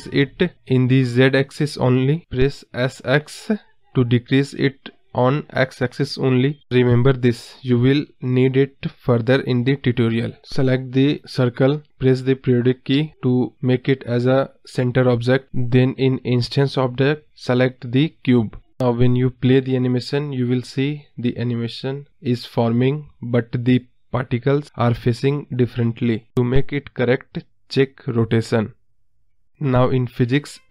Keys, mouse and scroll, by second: 0.6 s, 3.5 scroll up 3, 3.7 middle click, 4.5 s, 6.7 middle click, 7.6 s, 8.8-9.1 middle drag, 9.1-10.3 scroll down 5, 9.3 middle drag, 10.3 click, 11.1 KP_Decimal, 11.3 scroll down 1, 11.4-11.8 middle drag, 11.8 scroll up 2, 12.0-12.8 scroll down 1, 13.7 click, 16.1 click, 16.6 space, 17.2-17.6 scroll up 2, 17.6 click, 18.2 scroll up 2, 18.3 middle drag, 18.5 scroll down 5, 18.7-19.2 middle drag, 19.2-19.5 scroll up 2, 26.2 click, 27.4-28.0 scroll up 2, 28.5-29.2 scroll down 3, 30.1-30.7 drag.